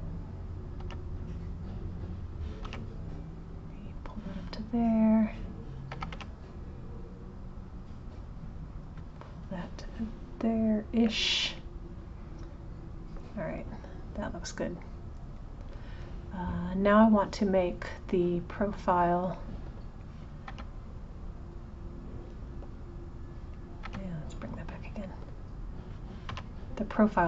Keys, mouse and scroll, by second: 5.0 click, 11.1-14.1 middle drag, 14.6 click, 15.4 click, 16.5 click, 20.0 click, 20.5 g, 23.5 click.